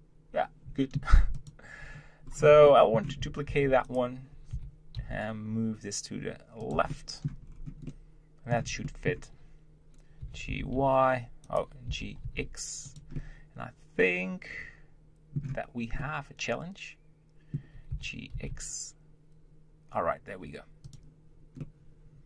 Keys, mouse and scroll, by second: 1.3 click, 1.9-2.2 scroll down 1, 2.6-3.0 shift+middle drag, 3.0-3.5 scroll up 1, 3.5 shift+d, 4.5 g, 6.9-7.4 shift+middle drag, 7.4-7.9 scroll up 1, 7.9-10.2 middle drag, 10.2 g, 11.9 g, 13.2-17.9 middle drag, 17.9 g, 21.6-22.2 middle drag.